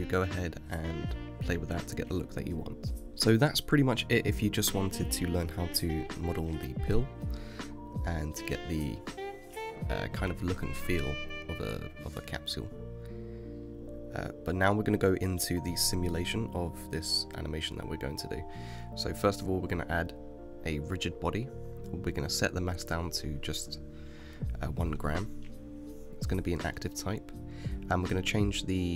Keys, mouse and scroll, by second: 2.9 g, 4.1 click, 5.7-9.2 drag, 9.2-10.0 shift+middle drag, 10.0 KP_Decimal, 10.7-13.7 middle drag, 17.8 click, 19.5-25.0 drag, 26.9-28.9 drag.